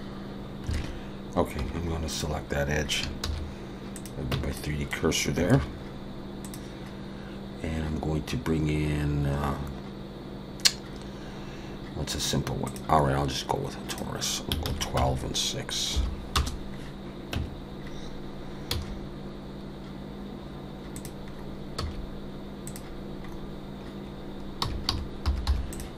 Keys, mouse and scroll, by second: 0.7 alt+a, 1.6 2, 2.1 click, 3.2 shift+s, 4.3 Tab, 4.6 middle click, 5.5 shift+a, 13.9 click, 16.7 scroll down 2, 17.4 Tab, 17.8-18.7 scroll down 2, 18.7 s, 21.3-21.8 scroll up 4, 21.8 s, 23.3-24.5 scroll up 2, 24.6 r.